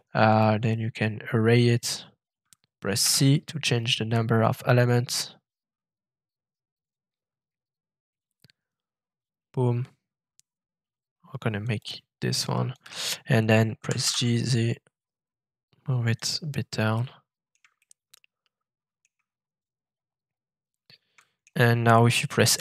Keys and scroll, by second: 3.0 c, 13.8 g, 14.0 z, 22.5 shift+s.